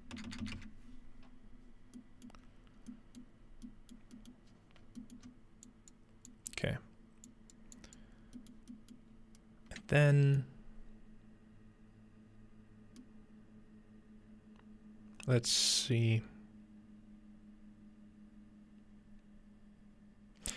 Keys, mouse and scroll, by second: 2.0-3.2 middle drag, 2.4-3.4 scroll up 1, 3.4 middle click, 3.4-4.2 scroll down 1, 3.9 middle click, 4.6-5.3 scroll down 4, 5.3 scroll up 2, 5.4-6.7 middle drag, 5.7 click, 7.3 click, 7.8 click, 8.2-9.1 scroll down 1, 8.6-10.2 middle drag, 9.1-10.2 scroll up 2, 10.2-12.3 scroll up 1, 10.5-12.3 middle drag, 12.3-13.0 scroll down 2, 13.0-20.5 middle drag.